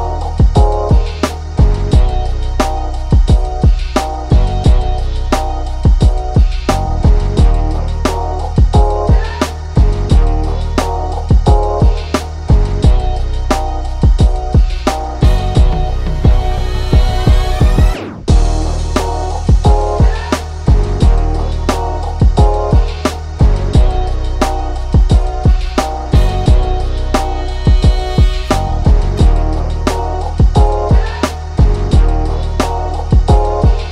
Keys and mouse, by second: 0.1 click, 1.6 click, 2.6 click, 3.5 ctrl+x, 4.0-6.8 drag, 8.8-11.0 drag, 11.9-14.7 drag, 16.2 click, 16.9 ctrl+c, 17.1-19.1 drag, 20.0 click, 21.2 click, 22.2 click, 24.5 click, 25.4 click, 26.4 click, 28.9 click.